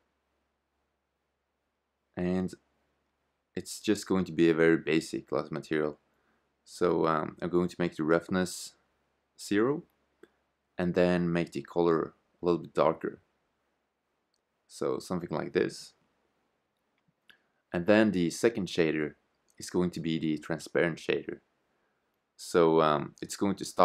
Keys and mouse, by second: 7.9-9.8 drag, 10.0-11.9 drag, 18.8-20.7 drag, 22.9-23.8 drag.